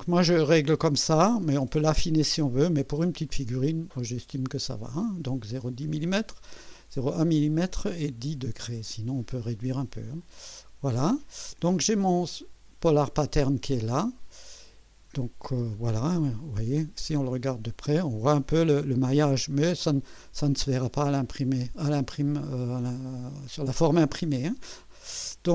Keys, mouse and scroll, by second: 10.2 click, 15.5 space, 16.0-16.4 scroll up 1, 16.7 scroll up 2, 16.8 scroll down 2, 17.1-17.9 right drag, 19.2 scroll down 2, 20.2 scroll down 2, 20.6-24.0 drag, 24.2 scroll down 1, 24.5 scroll up 1, 25.1-25.5 right drag.